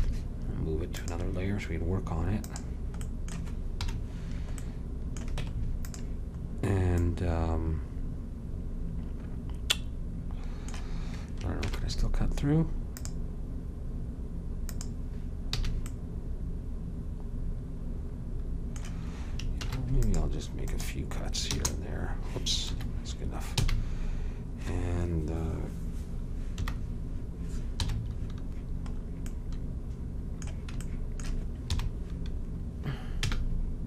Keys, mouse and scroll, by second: 2.5-4.4 drag, 3.9 KP_Decimal, 5.5 Tab, 11.7 ctrl+r, 15.7 a, 19.7 ctrl+r, 21.7 space, 23.7 a, 26.7 KP_1, 27.9 KP_3, 31.8 KP_3, 33.3 z.